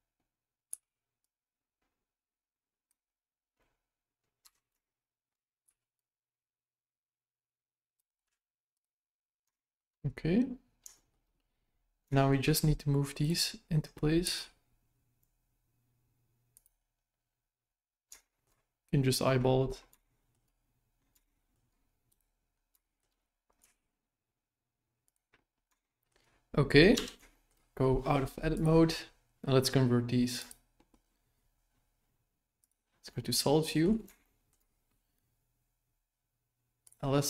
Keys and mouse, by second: 0.7 c, 4.8 shift+middle click, 5.6 c, 8.2 x, 9.6 shift+middle click, 10.9 middle click, 12.1 shift+middle click, 13.2-14.2 right drag, 14.2 g, 18.2 shift+middle click, 20.0 shift+middle click, 21.2 shift+middle click, 22.0 right click, 22.8 shift+middle click, 23.6 g, 25.8 shift+middle click, 26.9 Tab, 27.3 shift+middle click, 28.5-30.5 drag, 32.6 click, 33.0-33.8 middle drag, 34.2 shift+middle drag, 36.8 click.